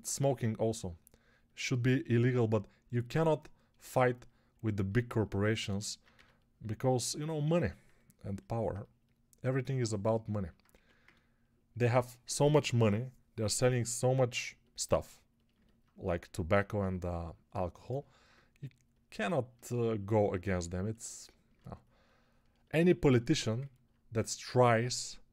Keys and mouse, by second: 6.0 x, 10.6 1, 21.2 alt+middle click.